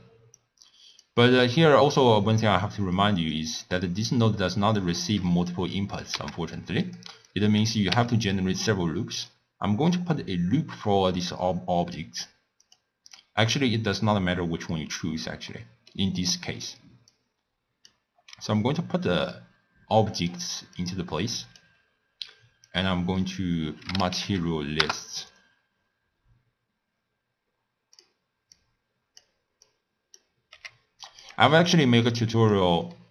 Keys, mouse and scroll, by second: 0.4-1.6 drag, 4.1 click, 5.1 click, 6.6 x, 6.8 click, 7.3 click, 7.9 w, 13.1 click, 14.0 drag, 15.8-17.1 middle drag, 17.1 click, 18.6 click, 20.8 click, 22.7-27.3 drag, 28.6 drag, 29.8 click, 30.6 g, 31.8 click, 32.9 middle click.